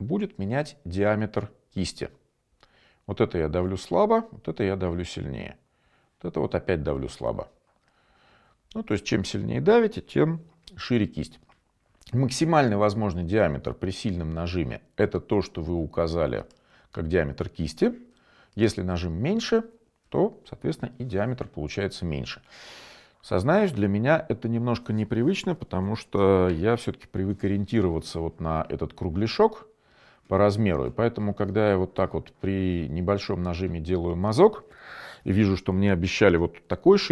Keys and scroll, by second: 23.6-24.6 typing.